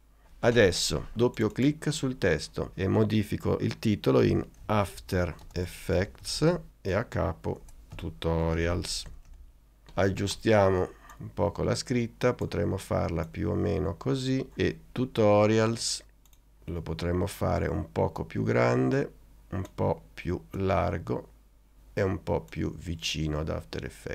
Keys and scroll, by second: 4.4-9.6 typing, 7.7 shift+Return.